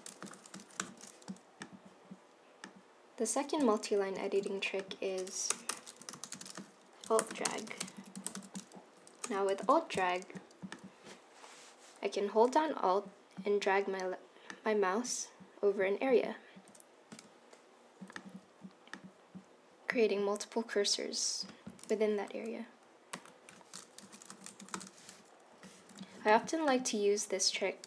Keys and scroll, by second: 0.9 shift+y, 4.2 super+c, 5.6 Return, 5.8-9.0 typing, 9.6 Return, 9.6 super+v, 23.3 Left, 24.2-25.4 typing, 25.9 super+z.